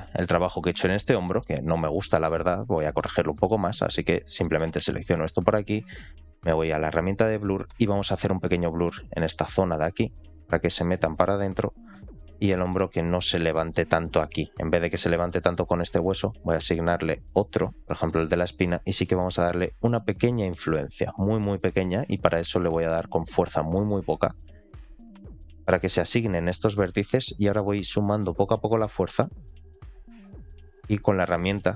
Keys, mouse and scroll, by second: 1.1 middle click, 2.1 alt+middle click, 2.4 scroll up 2, 2.7 middle click, 3.2 shift+middle click, 4.3 middle click, 6.9 click, 7.3 middle click, 7.8 f, 8.6 click, 8.8 click, 9.0 click, 9.5 click, 9.8 click, 10.1 click, 10.6 click, 10.8 click, 11.1 click, 11.4 click, 11.6 click, 11.8 click, 12.2 click, 12.5 middle click, 13.1-13.4 scroll down 2, 13.4 middle click, 15.0 middle click, 15.8 ctrl+click, 17.3-17.8 scroll up 1, 17.8 ctrl+click, 17.8 middle click, 18.6 scroll up 2, 19.4 scroll up 1, 19.5 f, 22.0 click, 23.9 f, 24.8 click, 25.1 click, 25.4 click, 25.7 click, 26.1 click, 26.3 click, 27.4 click, 28.4 click, 28.6 click, 29.1 click, 29.3 click, 29.6 click, 30.9 click.